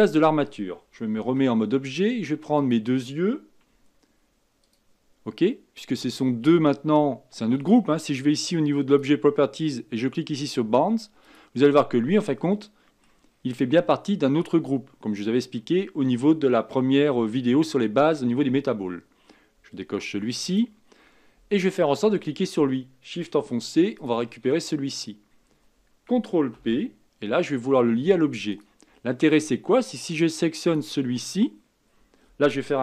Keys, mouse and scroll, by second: 1.2 Tab, 2.5 click, 4.6 shift+click, 8.9 click, 11.2 click, 12.4-13.3 middle drag, 13.3-15.0 scroll up 7, 15.0-15.5 scroll down 5, 15.5-16.5 middle drag, 16.5-17.1 scroll down 3, 17.1-20.2 shift+middle drag, 20.4 click, 21.0-21.5 scroll up 4, 21.5-24.0 scroll down 1, 24.0 shift+click, 24.8-26.5 scroll down 2, 26.5 ctrl+p, 29.0-29.5 scroll down 3, 30.6 click.